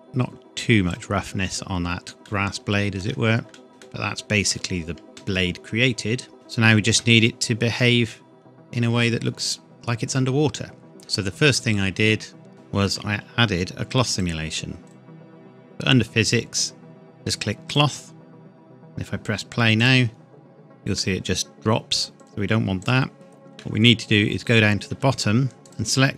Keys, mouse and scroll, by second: 0.0 click, 2.2 shift+middle click, 3.6 shift+middle click, 3.7 scroll down 2, 3.8 middle click, 6.3-6.7 scroll down 2, 6.7 scroll up 1, 6.9 middle click, 11.0 click, 12.5 click, 14.1 click, 17.7 click, 21.2-21.5 scroll up 1, 22.1 click, 22.2-22.8 scroll up 1, 22.8 click, 23.1 shift+middle click, 23.8 scroll up 1, 24.9 Tab, 25.6 click.